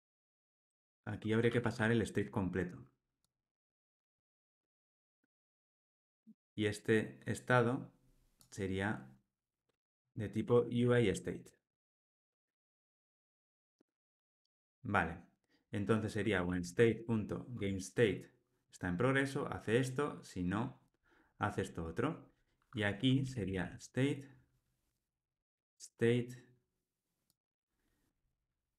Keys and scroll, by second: 2.1 Escape, 4.1 alt+Return, 12.2 Tab, 13.0 Tab, 13.4 ctrl+alt+o, 17.6 Tab, 23.7 Escape.